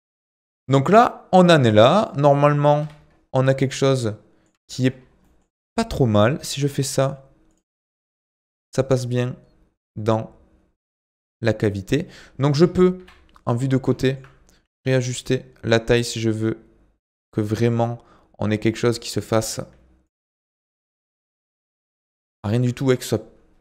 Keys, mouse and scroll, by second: 0.2 scroll down 4, 0.5 Tab, 0.7-2.8 middle drag, 2.8 KP_7, 3.3 scroll up 2, 3.6-5.0 middle drag, 5.0 scroll down 1, 5.2 middle click, 5.6 click, 6.5 g, 7.7-10.7 middle drag, 12.5 KP_1, 13.5-14.0 scroll up 1, 14.0 shift+middle click, 14.5 s, 21.1-21.6 scroll up 2, 21.6-23.3 shift+middle drag, 23.3-23.6 scroll down 3.